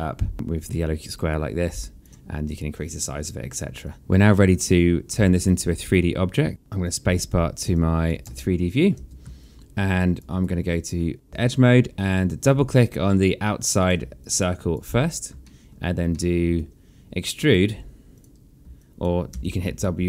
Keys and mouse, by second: 0.5 click, 3.8 alt+click, 4.6 right click, 5.1 click, 6.6 click, 7.8 space, 9.0 alt+click, 10.0 right click, 11.3 alt+click, 13.2 click, 13.8 alt+click, 15.0 alt+middle click, 17.7 click, 18.4 alt+click, 18.9 w.